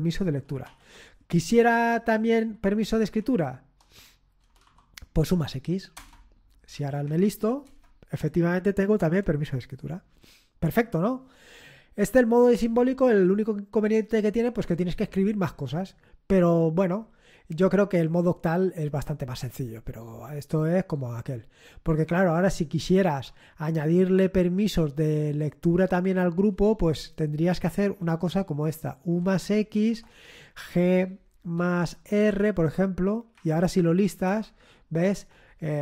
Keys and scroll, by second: 0.7 ctrl+l, 1.5 Up, 2.0 Up, 2.9 ctrl+Left, 3.2 ctrl+Left, 3.9 Left, 4.4 BackSpace, 4.6 x, 6.0 Return, 6.7 Up, 7.1 Up, 7.6 Return, 26.8 Up, 27.5 Up, 28.0 Left, 28.5 Left, 28.9 Left, 29.1 Left, 29.5 Left, 29.8-32.0 typing, 32.6 Return, 33.3 Up, 33.7 Up, 34.3 Return.